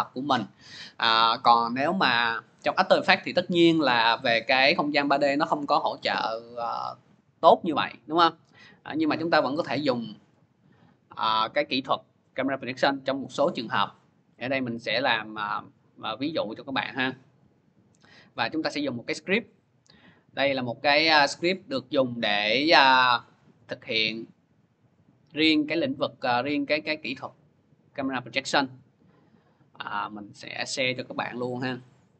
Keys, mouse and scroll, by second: 2.1 click, 3.3 click, 20.8 click, 23.3 click, 28.3 click, 31.8 click, 31.9 click.